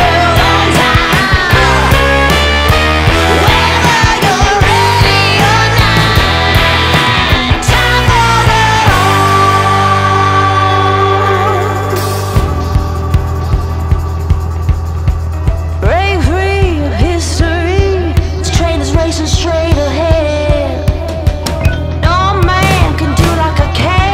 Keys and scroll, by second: 7.0 ctrl+Page_Down, 11.0 ctrl+Page_Down, 15.2 Escape, 15.8 F4.